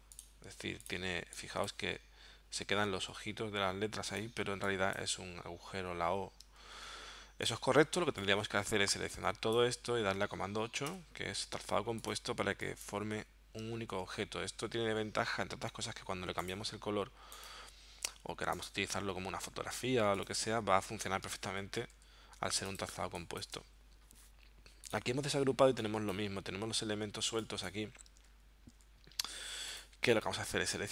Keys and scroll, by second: 2.8 super+z, 6.8 super+z, 10.9 super+8, 13.9 super+z, 21.5 super+z, 23.0 space, 28.3 super+z.